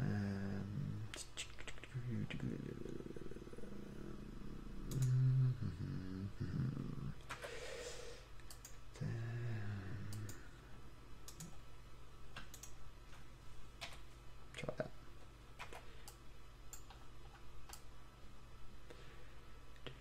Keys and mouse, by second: 2.0 middle click, 5.2-7.5 right drag, 7.5 x, 14.0 f, 15.8 c.